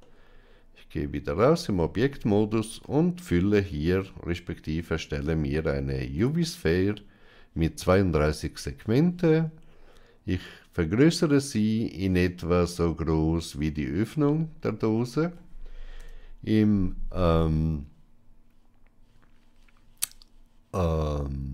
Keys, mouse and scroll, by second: 2.5 space, 10.4-13.9 drag, 15.9 KP_1.